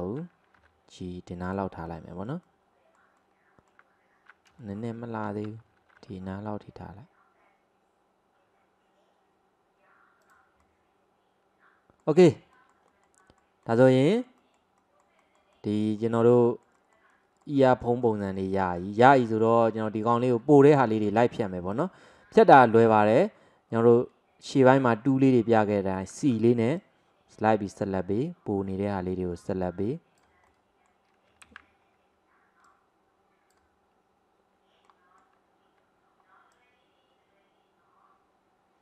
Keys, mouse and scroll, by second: 0.7 g, 1.9-4.7 middle drag, 6.1 g, 10.7-19.8 middle drag, 19.8-20.1 scroll down 1, 20.1-21.7 middle drag, 21.7 click, 22.2-26.3 middle drag, 26.3 c.